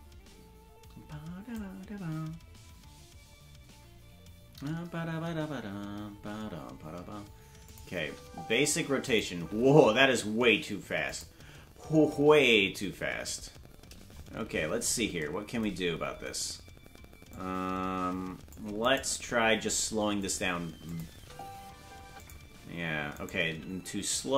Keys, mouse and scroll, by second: 7.7 click, 7.9 space, 9.1 click, 9.1 space, 9.3 space, 11.1 click, 11.1 space, 11.6 space, 12.2 space, 13.8-15.0 scroll up 4, 15.0 scroll up 14, 17.3-18.5 drag, 18.8 right click, 19.2 g, 20.9 click, 21.1 space, 22.2 click, 22.2 space, 23.1 right click, 23.5 g.